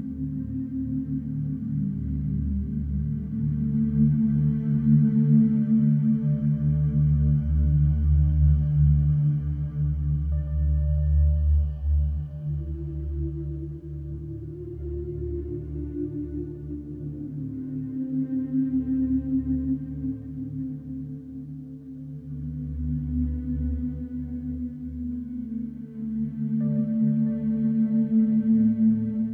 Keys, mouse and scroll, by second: 0.0 shift+d, 1.5-1.9 middle drag, 1.9 Tab, 2.2 click, 2.6 x, 3.1 click, 3.4 x, 5.1 middle click, 5.8 alt+middle click, 6.1 scroll up 1, 6.4 shift+middle click, 6.6-7.2 scroll up 1, 7.2 e, 11.6 Tab, 12.2 alt+middle click, 12.9 g, 15.3-16.1 middle drag, 16.1 scroll down 2, 16.7 s, 20.8-21.4 middle drag, 21.4 click, 21.6 scroll down 1, 21.8-22.5 middle drag, 22.5 ctrl+s, 22.8 scroll down 2, 23.0-24.0 middle drag, 24.0 middle drag, 24.6 click, 26.1-27.0 middle drag, 27.0 scroll up 1, 27.3 click, 28.8 Tab.